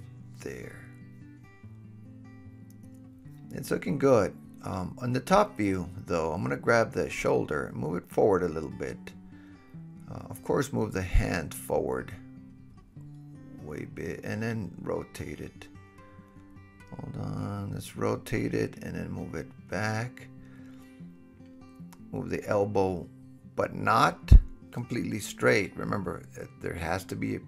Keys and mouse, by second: 5.7 KP_7, 7.3-10.2 middle drag, 7.9 KP_7, 8.7 g, 10.2-12.1 drag, 12.1-15.1 middle drag, 13.9 g, 15.1-22.4 drag, 15.8 r, 19.4 r, 21.0 g, 22.4-25.6 middle drag, 23.5 g, 25.6-27.4 drag.